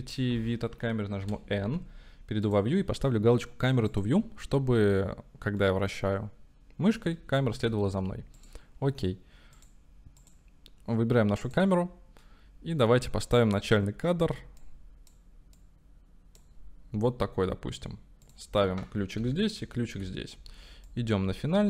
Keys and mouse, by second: 1.3 n, 2.6 click, 3.9 click, 5.8-7.0 middle drag, 7.6 shift+middle drag, 8.5-8.8 drag, 9.6 click, 10.3 click, 12.3 click, 14.6-16.4 drag, 18.3 click, 19.3 i, 20.0 i, 20.9-21.6 drag.